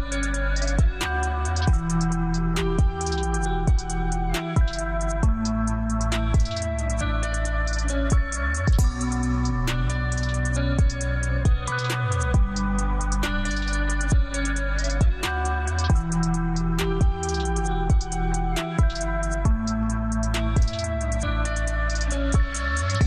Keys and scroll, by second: 10.8 space, 13.7 Escape, 17.3 shift+F2, 18.7 F9.